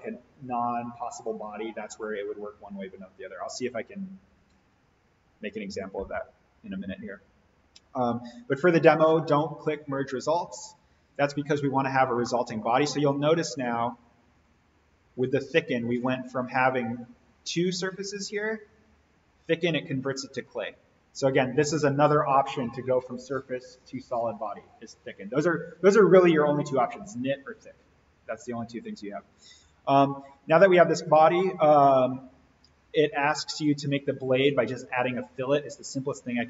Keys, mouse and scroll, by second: 9.1 click, 11.5 scroll up 1, 12.1-12.9 middle drag, 13.7-16.6 drag, 29.4 click, 33.5 click, 36.3-36.4 scroll down 1.